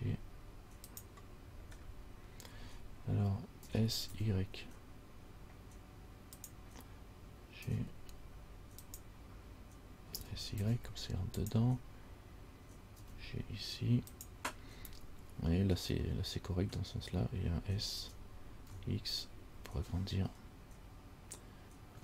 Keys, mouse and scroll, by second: 0.0 g, 2.0-3.1 scroll up 3, 3.1 scroll up 1, 3.8 s, 7.8 g, 10.3 s, 13.2 g, 18.2 s.